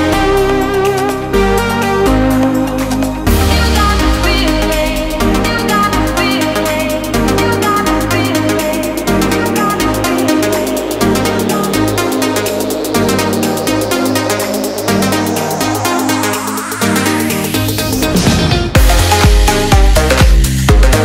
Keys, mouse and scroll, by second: 0.9 click, 7.6 click, 11.2 click.